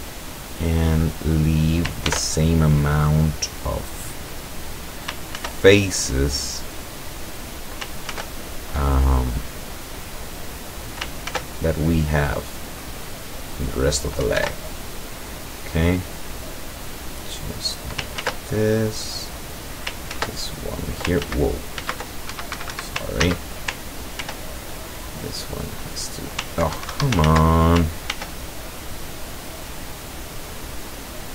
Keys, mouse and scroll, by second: 1.1 click, 2.1 ctrl+r, 2.6 ctrl+click, 4.7 click, 5.4 ctrl+r, 5.7 ctrl+click, 7.2 click, 8.2 ctrl+r, 8.5 ctrl+click, 10.6 click, 11.3 ctrl+r, 11.6 ctrl+click, 13.7 click, 14.5 ctrl+r, 16.0 click, 17.6 click, 18.3 ctrl+r, 18.7 ctrl+click, 19.5 click, 20.2 ctrl+r, 20.5 ctrl+click, 21.3 ctrl+z, 22.3 ctrl+Escape, 23.3 ctrl+z, 24.3 ctrl+r, 25.8 click, 26.8 ctrl+Escape, 27.3 ctrl+z, 28.2 ctrl+r.